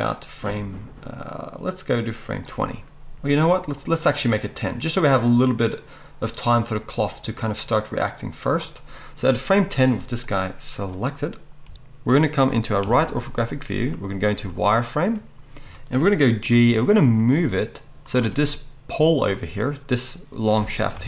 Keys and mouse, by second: 11.6 g, 12.8 KP_3, 14.3 z, 16.5 g, 18.1-21.0 middle drag, 20.9 KP_3.